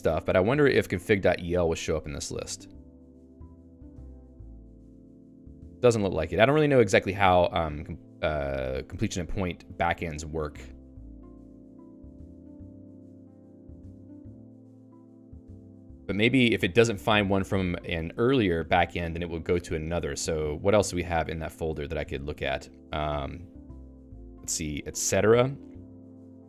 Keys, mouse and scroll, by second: 1.7-3.7 Down, 3.9 Down, 4.1 Down, 4.2 Down, 4.4 Down, 4.6 Down, 4.8 Down, 5.0 Down, 5.2 Down, 5.4 Down, 5.6 Down, 5.8 Down, 6.0 Down, 6.2 Down, 6.6 Down, 6.9 Down, 7.1 Down, 7.3 Down, 7.5 Down, 7.7 Down, 8.2 Down, 8.5 Down, 9.1 Down, 9.9-11.7 Up, 13.7 Down, 14.3 ctrl+g, 16.8-19.7 typing, 21.9 ctrl+f.